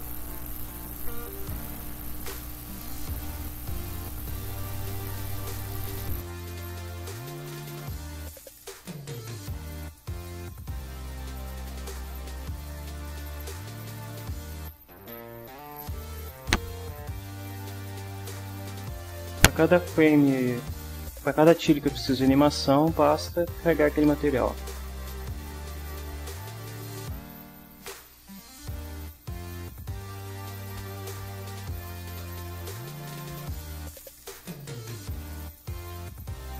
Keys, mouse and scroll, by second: 1.5-5.2 drag, 6.7 ctrl+s, 8.3 click, 9.2-10.1 drag, 11.5 ctrl+scroll down 2, 12.0 ctrl+scroll up 2, 12.2-12.6 scroll down 2, 12.6 scroll up 2, 12.7 scroll down 2, 13.5 scroll up 1, 13.7-14.7 scroll down 3, 14.8-15.5 scroll down 2, 17.1 click, 23.0 click, 23.8 click, 35.1 click, 36.4 click.